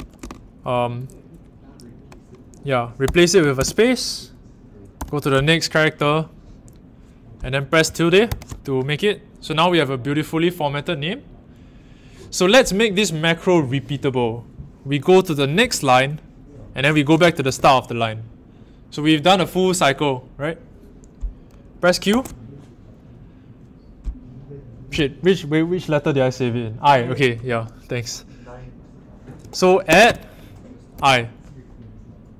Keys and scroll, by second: 3.0 r, 4.9 l, 8.2 shift+`, 15.6 i, 17.4 shift+6, 22.1 a, 29.8 shift+2, 30.9 i.